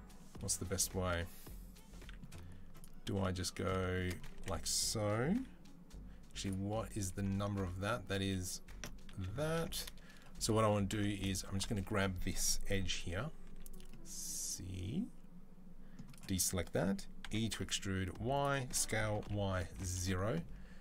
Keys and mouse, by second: 2.5 alt+click, 2.6-6.3 alt+middle drag, 4.1 1, 6.3 click, 8.9 ctrl+c, 9.1 ctrl+c, 9.2 ctrl+c, 10.9 alt+click, 13.3 c, 17.1 e, 18.5-20.8 middle drag, 18.5 s.